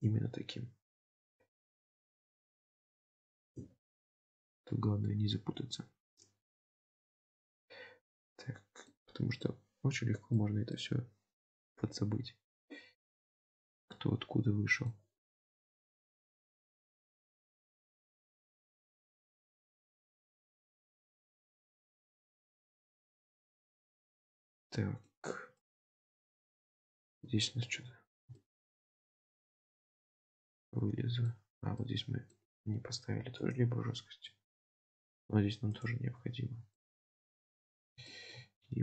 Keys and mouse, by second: 1.5 middle click, 7.6-8.9 middle drag, 9.6 middle click, 10.7-12.6 middle drag, 13.2-15.0 middle drag, 22.1-23.3 middle drag, 23.7 Tab, 24.0-25.1 middle drag, 25.7 middle click, 26.9-27.3 middle drag, 27.4-27.8 shift+middle drag, 28.5 shift+middle click, 29.7-31.3 middle drag, 31.8 middle click, 33.0 ctrl+r, 36.2 Tab, 36.8-37.6 middle drag, 38.2 shift+middle click.